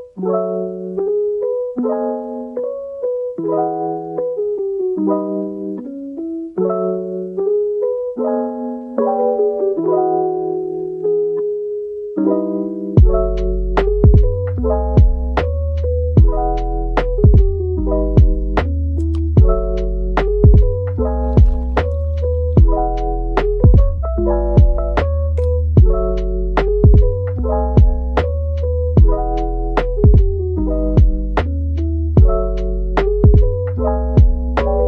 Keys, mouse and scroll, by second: 0.5 scroll up 1, 2.4 middle click, 3.1 typing, 5.0-7.2 typing, 9.1-9.6 typing, 12.3 typing, 14.5 middle click, 15.4-16.3 typing, 18.7 typing, 21.9 right click, 25.6 Tab, 26.3 Tab, 27.7 alt+click, 28.5 right click, 30.4 alt+click, 30.8 alt+right click, 31.4 Tab, 31.8 middle click.